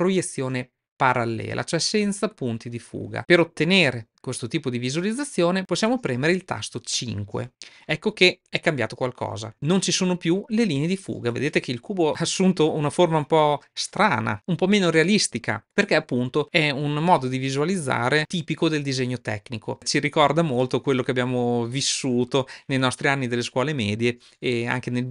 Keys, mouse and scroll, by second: 7.5 KP_0.